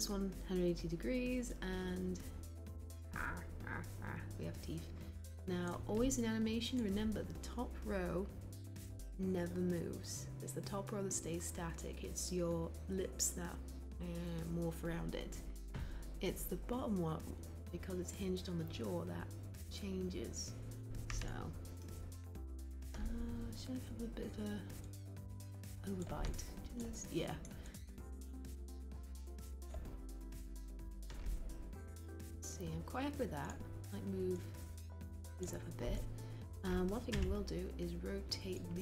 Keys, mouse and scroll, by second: 37.1 e.